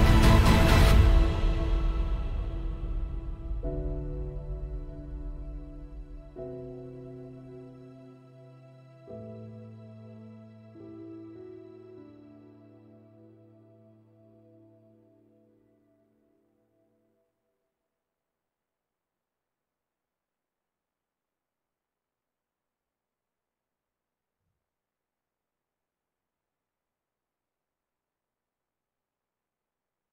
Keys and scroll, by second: 26.9 super+Tab, 27.6 space, 27.8 space, 28.4 super+=.